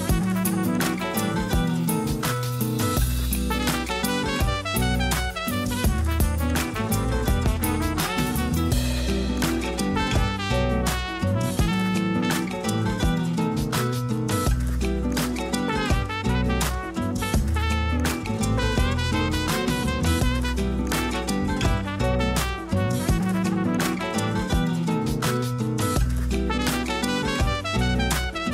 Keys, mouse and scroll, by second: 0.5 scroll up 4, 1.0 shift+middle click, 1.5-1.9 scroll up 3, 1.9 g, 2.9-3.6 scroll down 6, 3.6 a, 3.8 a, 4.1 click, 4.9-5.5 scroll up 7, 5.5 g, 7.7-8.1 scroll down 6, 8.3 a, 8.5 a, 8.8 Tab, 9.1 z, 9.8 scroll up 4, 10.3-11.1 shift+middle drag, 11.1 a, 11.3 a, 11.5-13.0 scroll up 1, 13.0-14.1 scroll up 2, 14.1-17.2 shift+middle drag, 17.5-20.4 scroll up 3, 20.4 click, 21.3 Tab, 22.6 3, 22.9 click, 23.1 click, 25.1 shift+d.